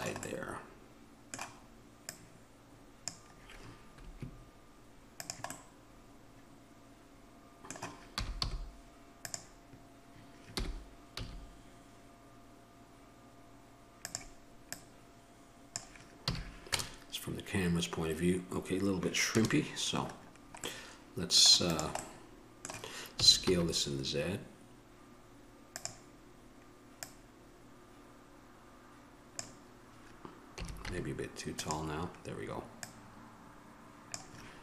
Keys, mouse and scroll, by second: 0.9-5.8 drag, 5.8-8.3 middle drag, 8.3 g, 10.8 g, 16.5 a, 16.9 KP_0, 19.6 KP_0, 20.4 middle click, 21.9 right click, 22.3-24.3 middle drag, 23.4 s, 34.3 click.